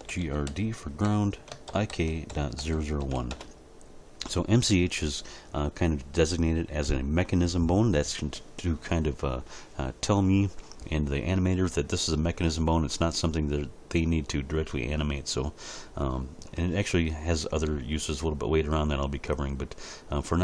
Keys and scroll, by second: 0.0-3.0 typing, 3.3 Return.